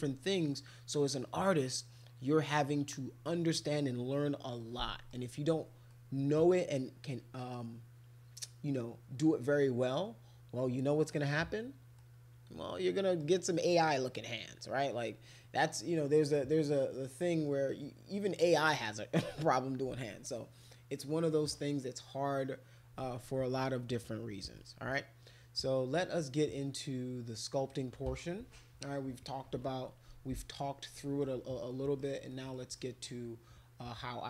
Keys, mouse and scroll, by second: 1.1 middle click, 2.3 middle click, 3.6 middle click, 4.8 middle click, 5.9-10.6 middle drag, 12.0-13.2 middle drag, 22.4 middle click, 24.5 middle click, 25.6-27.7 right drag, 30.9 middle click, 31.7 middle click, 32.3 middle click, 32.8 middle click.